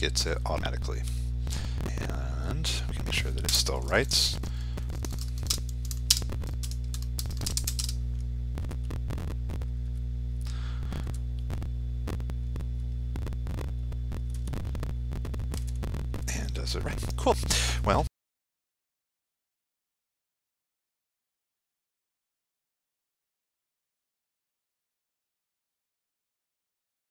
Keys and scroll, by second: 2.4 ctrl+s, 4.4 ctrl+r.